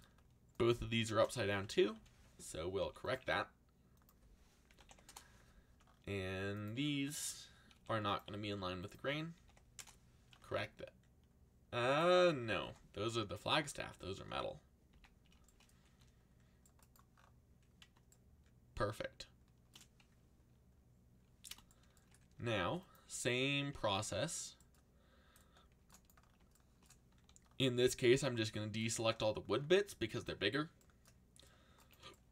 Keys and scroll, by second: 1.9 ctrl+l, 2.8 r, 4.4-5.3 typing, 7.7 r, 9.1-9.9 typing, 12.5 ctrl+z, 14.9 a, 15.8 c, 22.1-23.7 typing, 27.1 c.